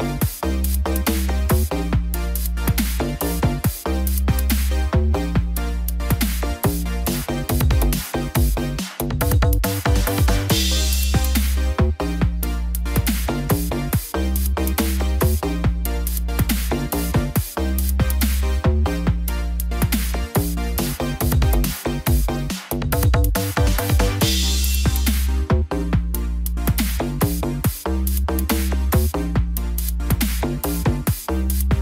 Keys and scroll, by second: 0.3 ctrl+=, 18.0 ctrl+-, 18.5 ctrl+0.